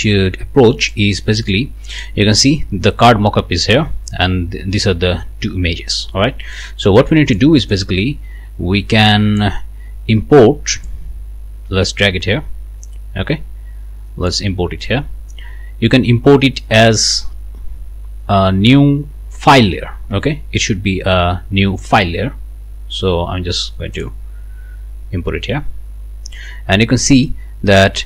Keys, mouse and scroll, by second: 0.9 click, 1.9 click, 6.5-7.5 drag, 7.7-9.6 drag, 10.8-14.5 drag, 23.9 click, 25.4 scroll down 1.